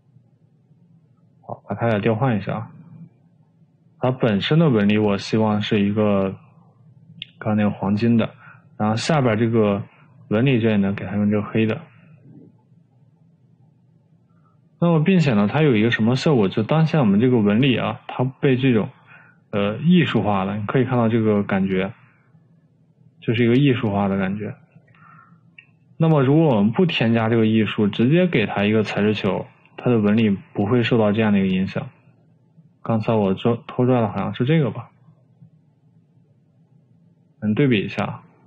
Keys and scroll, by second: 25.3 Escape, 26.2 Escape.